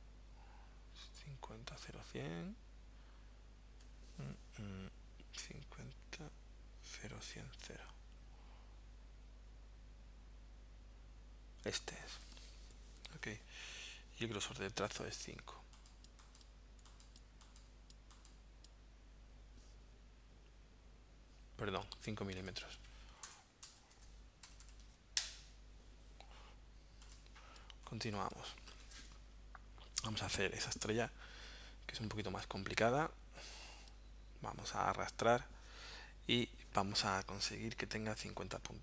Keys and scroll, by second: 23.3 BackSpace, 24.4 m, 25.2 Return, 27.6 space.